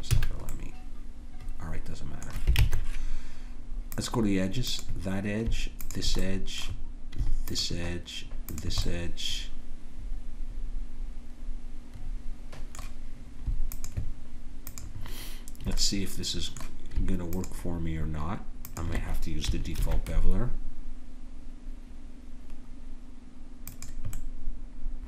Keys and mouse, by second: 0.2 a, 0.5-1.5 drag, 2.6 ctrl+Tab, 4.7-5.8 drag, 10.4 click, 13.7-20.5 drag, 19.8 ctrl+b, 24.2 click.